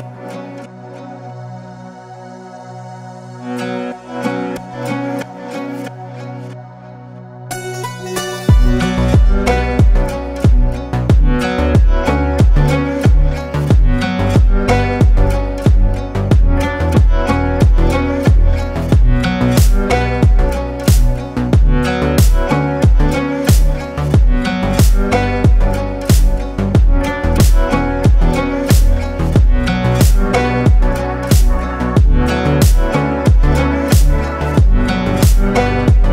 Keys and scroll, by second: 5.6 ctrl+shift+g, 11.1 space, 12.8 ctrl+space, 13.4 ctrl+space, 14.6 ctrl+space, 29.9 Num_Lock, 30.1 KP_5.